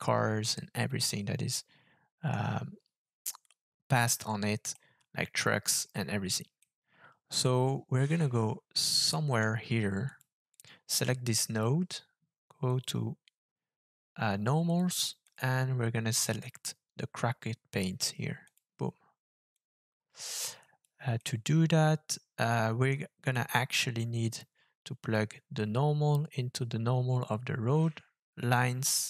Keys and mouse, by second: 0.7-2.3 middle drag, 4.8-5.8 middle drag, 6.7-9.4 middle drag, 10.1 click, 10.5-11.6 drag, 12.8-14.8 drag, 15.2-18.5 drag, 19.6-20.8 drag, 21.2-22.9 middle drag, 23.3-24.4 drag, 25.1-27.2 drag.